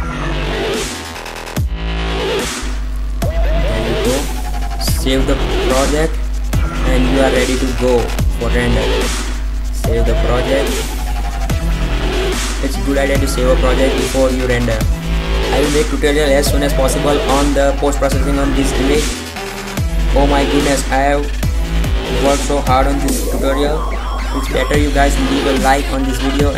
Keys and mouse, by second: 0.2 ctrl+z, 1.7 shift+z, 3.8 shift+z, 8.5 shift+z, 10.8 ctrl+s, 11.5 shift+z, 14.6 Return, 15.8-16.2 drag, 26.3 click.